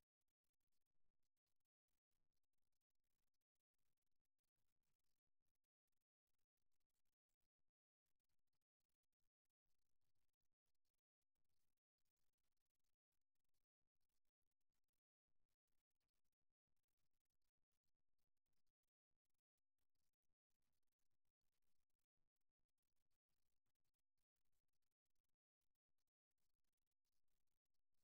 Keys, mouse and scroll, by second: 3.8-6.1 drag, 6.1-15.1 middle drag, 18.1-19.7 drag, 19.7-21.4 middle drag, 23.3-26.1 middle drag, 26.1-28.0 drag.